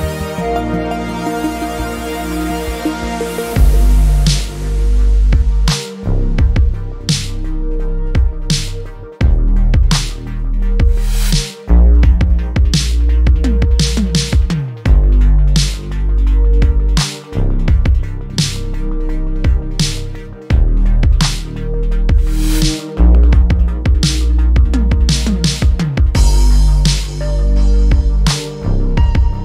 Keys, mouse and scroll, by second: 1.3-3.4 middle drag, 3.4 click, 4.3 Tab, 4.6 scroll down 4, 4.7-5.8 middle drag, 5.8-6.2 scroll up 1, 6.2 Tab, 6.8 scroll down 1, 7.1 click, 7.4-8.8 middle drag, 8.8-10.0 scroll up 2, 10.0 ctrl+r, 12.1-13.7 middle drag, 13.7 click, 14.2-16.5 middle drag, 18.0 ctrl+r, 20.0 click, 20.8 Tab, 21.0-21.4 scroll down 3, 21.4 click, 21.7-22.8 middle drag, 22.8-23.6 scroll up 1, 23.6 middle click, 24.0 Tab, 25.2 Tab, 25.6 click, 25.9-27.9 scroll down 11, 26.9 /, 27.9-29.4 middle drag.